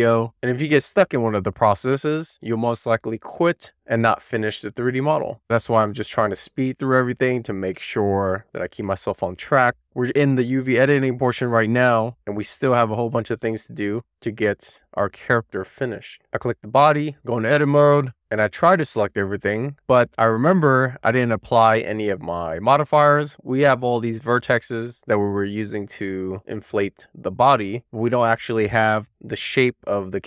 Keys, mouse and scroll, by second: 16.3 click, 16.8 a, 18.1 click, 19.0 Tab, 19.6 Tab, 20.5 a, 21.4 Tab, 21.9 click, 22.3 Tab, 22.6 click, 23.6 u, 24.3 u, 24.8 Tab, 26.7 a.